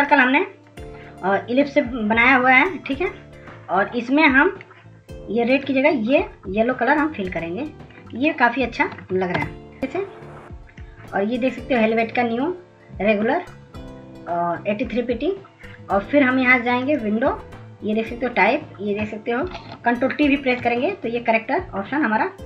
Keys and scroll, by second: 22.4 ctrl+s.